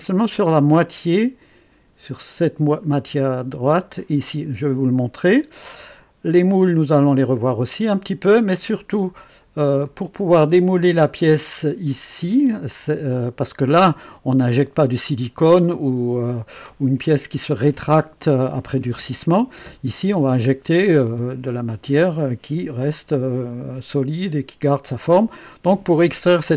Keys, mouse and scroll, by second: 5.6 click, 6.7-7.2 scroll up 2, 7.2 click, 8.3 click, 9.3-9.7 scroll up 2, 9.9-11.9 drag.